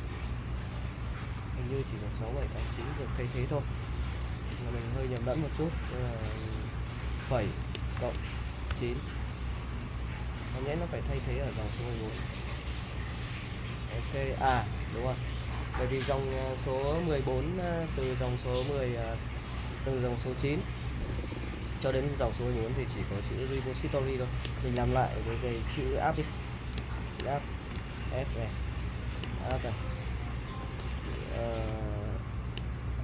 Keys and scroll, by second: 0.0-0.7 typing, 2.4 u, 3.7-5.0 typing, 7.0 ,, 8.7 9, 24.6 shift+;, 25.5 BackSpace, 27.0 shift+;, 27.7 BackSpace, 27.8 s, 28.0 /, 29.1-33.0 typing.